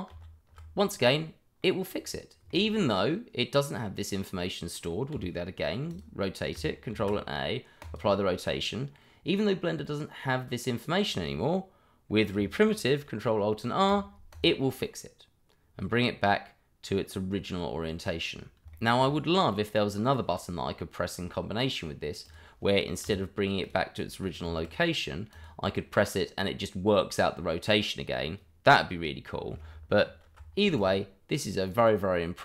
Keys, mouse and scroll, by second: 0.1 ctrl+alt+r, 1.6 middle click, 4.0 middle click, 5.1 r, 5.9 click, 6.9 ctrl+a, 7.8 click, 9.0 middle click, 13.4 ctrl+alt+r, 14.3 click, 15.8 middle click, 18.7 shift+middle click, 18.9 middle click, 19.0 shift+middle click, 19.0-19.8 scroll up 1, 19.8 middle click, 21.4-22.0 scroll down 1, 22.2 click, 23.0 r, 23.6 click, 24.5 ctrl+a, 25.3 click, 30.0 ctrl+alt+r, 30.7 click, 31.3-31.7 scroll down 1, 31.7 click.